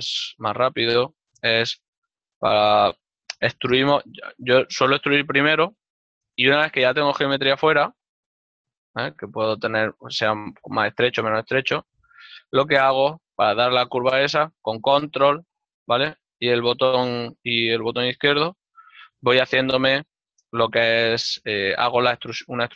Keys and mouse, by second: 1.9 z, 2.3 click, 2.7 ctrl+middle click, 4.0 e, 6.2 click, 7.4 ctrl+middle click, 9.3 s, 13.3 click, 14.2 click, 19.1 click, 19.7 middle click, 21.4 ctrl+middle click, 22.6 g.